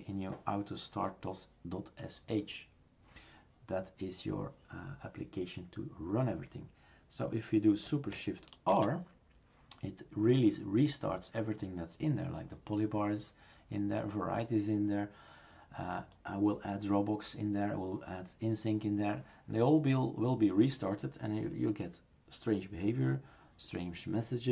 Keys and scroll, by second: 8.7 shift+super+r.